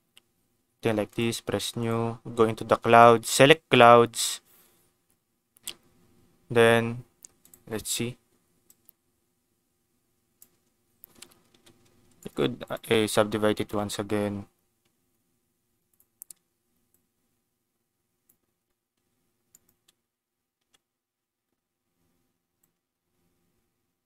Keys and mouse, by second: 1.0 click, 1.8 click, 2.8-3.8 drag, 7.4 click, 8.6-10.3 drag, 11.4 Tab, 11.8 a, 12.1 right click, 13.0 Tab, 13.5 ctrl+s, 15.8 click, 16.9-18.3 drag, 18.9 s, 19.5 click, 19.7 Tab, 20.5 Tab, 22.5-24.0 shift+drag.